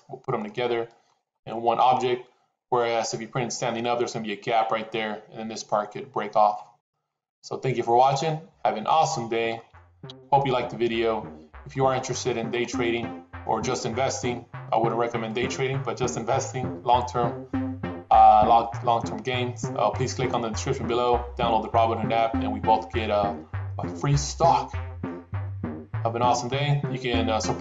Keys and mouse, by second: 0.3-0.9 middle drag, 1.3-1.9 middle drag, 6.4-9.6 middle drag, 10.0 KP_7, 11.5-12.2 middle drag, 12.8-14.8 middle drag, 15.1-22.8 middle drag, 22.2 typing, 23.6-27.6 middle drag.